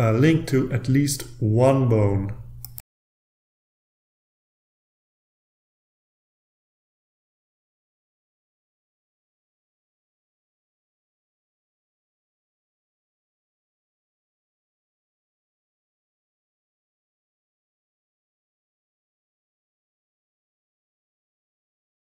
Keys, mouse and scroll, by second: 0.1 ctrl+a, 0.6 ctrl+click, 0.9 middle click, 1.2 click, 1.7 click, 2.0-2.4 scroll down 2, 2.4 click, 2.7 click, 3.0 ctrl+a, 3.3 scroll up 3, 3.6 ctrl+click, 4.5 click, 6.1 click, 7.0 click, 7.4 click, 7.7 click, 8.0 scroll down 2, 8.3 click, 8.8 scroll down 2, 9.1 click, 9.4 click, 9.8 click, 10.2 shift+click, 10.7 ctrl+a, 10.9-11.2 ctrl+scroll up 4, 11.7 ctrl+click, 12.1 middle click, 12.5 click, 12.9-13.4 scroll down 2, 13.6 click, 13.9 shift+click, 14.7 ctrl+a, 14.9 ctrl+scroll down 2, 14.9 scroll up 3, 15.4 ctrl+click, 15.8 right click, 16.1 click, 16.4 scroll down 2, 16.6 scroll up 2, 17.0 scroll down 2, 17.3 click, 17.8 shift+scroll up 2, 17.9 shift+click, 18.4 ctrl+a, 18.9 ctrl+click, 19.2 scroll down 2, 20.0 right click, 20.3 click, 20.9 click, 21.3 scroll down 2, 21.5 click.